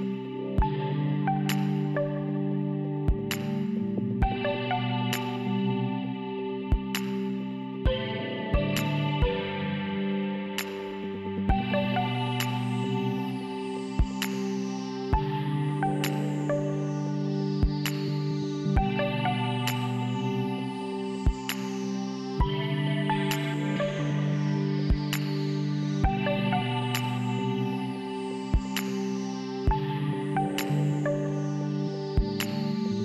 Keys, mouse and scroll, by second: 1.5 click, 10.4 F4, 11.5 F4, 12.4 F3.